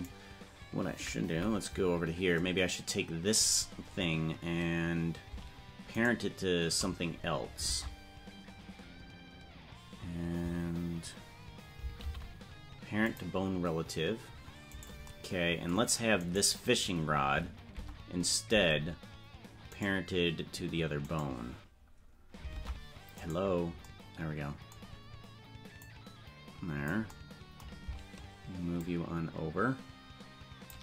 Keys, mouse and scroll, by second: 1.3 KP_Decimal, 2.0 scroll down 5, 6.1 shift+right click, 7.7 ctrl+Tab, 14.8 right click, 16.2-17.0 right drag, 17.7 Tab, 19.7-22.4 right drag, 22.6 Tab, 23.3 right click, 25.8-26.9 drag, 28.8-30.7 shift+drag.